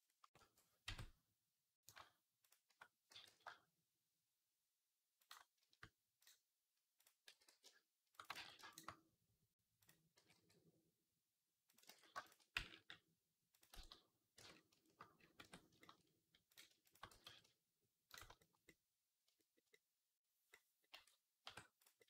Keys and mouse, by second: 0.7 Tab, 1.7 click, 1.7-8.4 shift+right drag, 3.0 g, 6.0 click, 7.1 g, 8.2 ctrl+z, 8.5 shift+click, 8.5 shift+right click, 9.6 click, 9.6 right click, 10.0 g, 11.7 ctrl+z, 12.1 shift+click, 12.1 shift+right click, 12.4 g, 13.6 ctrl+z, 14.2 Tab, 15.0-17.3 right drag, 15.3 Tab, 16.9 g, 19.1 shift+click, 19.6 click, 20.3 click, 20.7 Tab, 21.3 Tab.